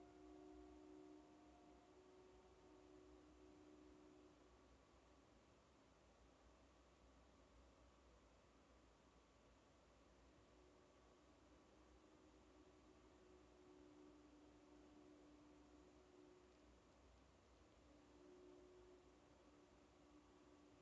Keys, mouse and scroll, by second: 2.3 click, 4.9-5.6 scroll down 1, 8.9 click, 12.9 scroll up 1, 13.3 scroll down 1, 15.2-15.8 scroll up 1.